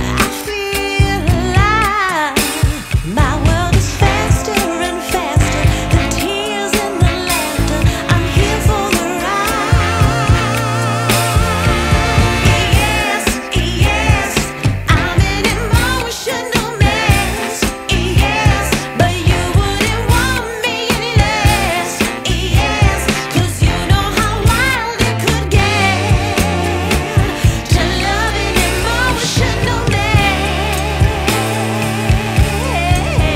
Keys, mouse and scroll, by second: 2.9 right click, 4.6 click, 5.2-5.7 scroll down 1, 5.7 right click, 6.3 shift+right click, 6.9-7.2 scroll up 1, 7.2 right click, 7.9-8.8 typing, 9.7 click, 11.4 right click, 12.2 click, 14.4 right click, 15.6 click, 15.9 scroll down 1, 16.2 right click, 17.0-19.1 scroll up 1, 19.1 right click, 19.7 click, 20.7 scroll down 1, 20.9 right click, 21.4 scroll up 1, 21.9 click, 23.1 right click, 24.7 click, 25.2 scroll down 1, 25.3 scroll up 1, 25.5 right click, 26.3 click, 26.9-27.3 scroll up 1, 27.3 click, 27.9 right click, 29.0 click, 29.3 scroll down 1, 29.6 scroll up 1, 29.8 right click, 30.9 Tab, 31.4 right click, 31.9 scroll up 1, 32.5 ctrl+shift+click, 32.8 scroll down 1, 33.0-33.3 scroll up 1.